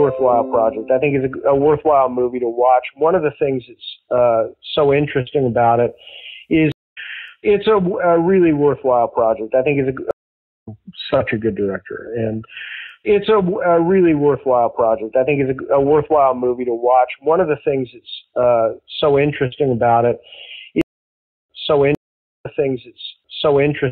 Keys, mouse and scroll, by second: 0.0 click, 1.6 click, 2.7 click, 5.6 click, 6.6 space, 6.7 click, 6.9 space, 8.3 click, 9.2 click, 10.0 space, 10.4 click, 10.6 space, 13.9 ctrl+s, 16.5 click, 18.1 click, 20.0 click, 20.7 space, 21.2 ctrl+shift+Delete, 21.4 space, 21.8 space, 22.3 click, 22.3 space.